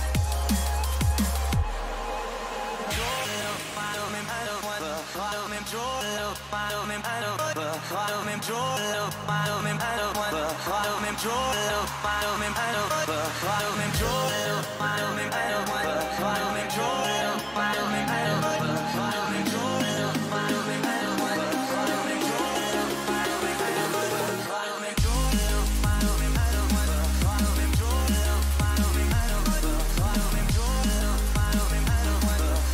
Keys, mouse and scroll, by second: 6.4-8.2 middle drag, 8.2 z, 9.8 KP_3, 10.8 z, 11.3 middle click, 17.3 ctrl+z, 21.2 k.